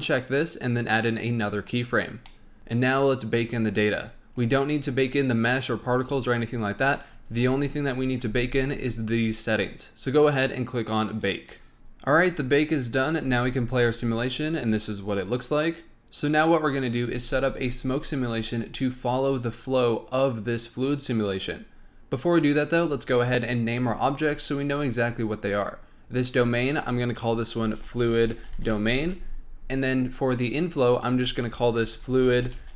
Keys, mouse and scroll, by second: 0.2 click, 0.9 click, 2.2-2.6 middle drag, 2.6 click, 3.4 scroll down 3, 4.3-6.8 scroll down 8, 6.8-7.3 scroll up 7, 7.3 scroll down 1, 7.4-8.4 scroll up 5, 8.4 scroll up 1, 11.0-11.7 drag, 13.2 space, 17.1 space, 26.4 click, 26.6-29.6 drag, 30.3 click, 30.7 click, 30.9-32.7 drag.